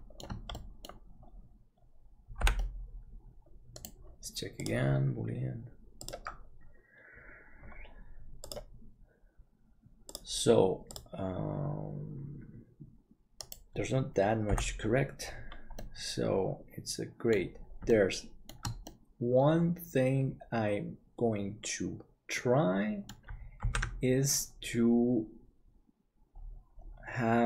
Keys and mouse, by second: 0.6 middle click, 2.4 l, 2.6-3.7 middle drag, 3.3 Tab, 5.4-14.6 drag, 14.6 h, 15.8-17.3 middle drag, 17.9 shift+middle click, 18.8-23.2 middle drag, 23.8 ctrl+s.